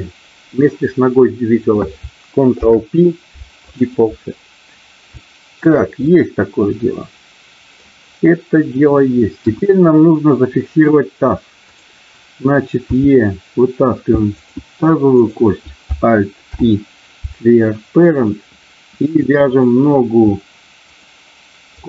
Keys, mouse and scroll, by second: 2.5 ctrl+p, 5.2 shift+middle click, 6.0-7.8 middle drag, 9.3 KP_1, 11.5 click, 12.9 e, 15.2 click, 16.5 alt+p, 19.7 click, 20.9 shift+click.